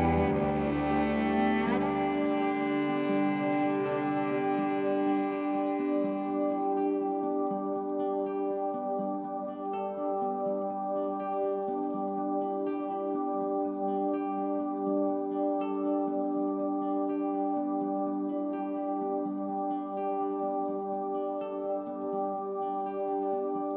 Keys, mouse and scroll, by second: 9.7 click, 9.9-10.9 scroll down 2, 10.9-12.3 shift+middle drag, 12.3 click, 21.3-22.2 scroll down 1, 22.2-23.5 scroll down 1.